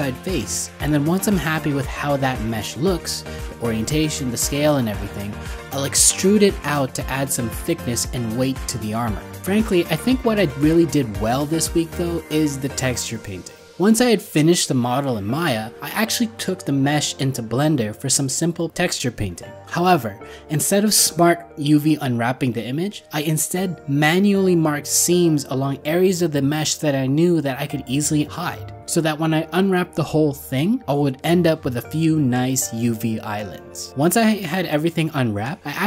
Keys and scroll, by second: 0.0 ctrl+z, 3.1 alt+Tab, 8.9 ctrl+z, 12.9 alt+w, 15.6 ctrl+z, 26.2 alt+Tab, 29.6 alt+w, 29.8 ctrl+z.